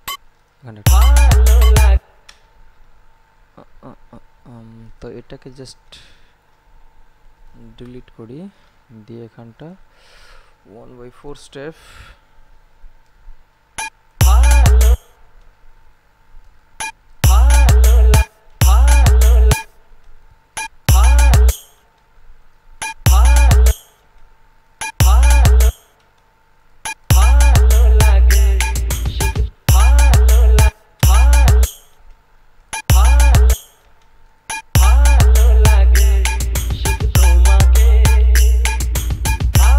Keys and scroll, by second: 1.0 space, 7.7 Delete, 14.4 space, 17.4 space, 23.2 space, 25.2 space, 27.3 space, 29.6 space, 35.5 space.